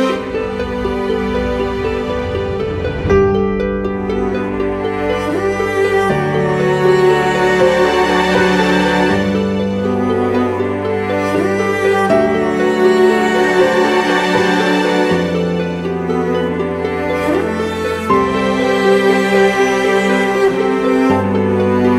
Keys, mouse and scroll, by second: 1.3 ctrl+t, 5.1 Return, 7.9 ctrl+t.